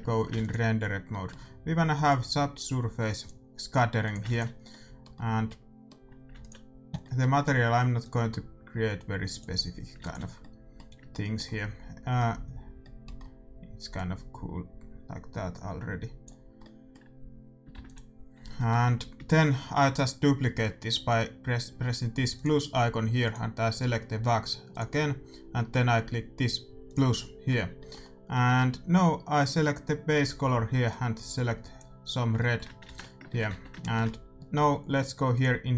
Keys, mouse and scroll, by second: 0.3 ctrl+s, 2.0-3.9 drag, 4.0-6.3 drag, 4.2 ctrl+s, 4.6-9.5 middle drag, 6.3 ctrl+s, 7.9-10.0 drag, 10.0 ctrl+s, 10.3-16.3 middle drag, 13.9-16.3 drag, 16.5 middle click, 17.7 shift+z, 18.1-19.7 drag, 22.3-28.8 drag, 28.4-30.9 middle drag, 29.3-31.2 drag, 32.3-35.7 middle drag, 32.8 ctrl+s, 33.4 Tab, 35.3-35.7 drag.